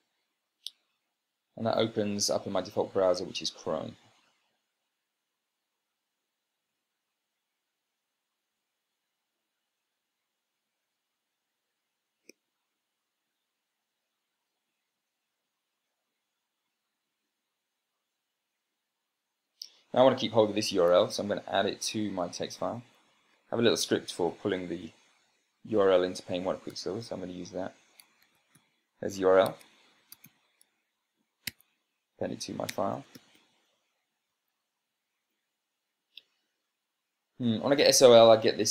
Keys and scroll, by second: 0.6 Return, 27.1 ctrl+alt+l, 28.7 Tab, 28.8 ., 30.0 Tab, 30.3 a, 30.7 p, 31.9 Tab, 32.9-34.1 typing, 34.8 Down.